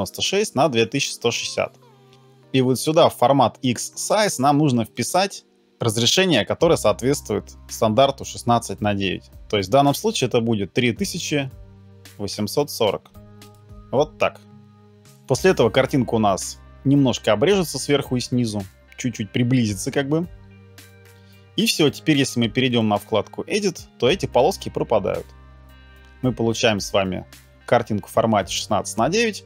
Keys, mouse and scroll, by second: 5.0 double click.